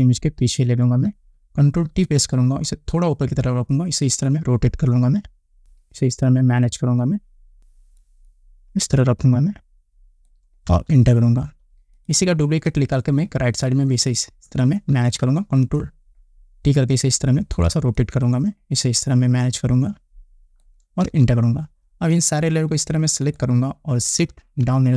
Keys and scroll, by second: 1.9 ctrl+t, 10.8 Return, 14.9 ctrl+t, 21.1 Return, 24.6 shift+Down.